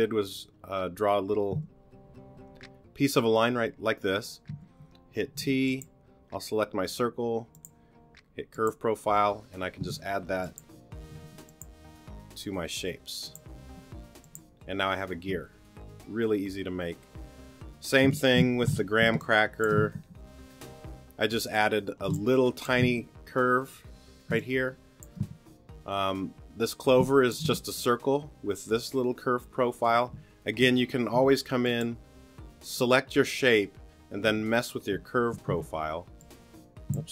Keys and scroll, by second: 1.5 t, 4.5 t, 11.2 t, 18.8 super+g, 19.1 super+space, 22.1 space, 24.3 space, 27.0 space, 31.1 t, 34.2 t, 35.5 t.